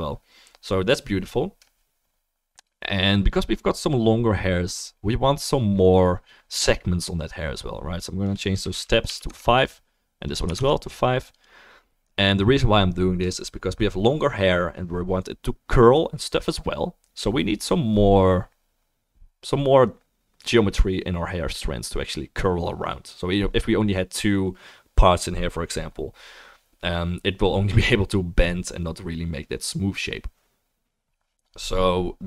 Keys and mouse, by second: 11.4-32.2 drag.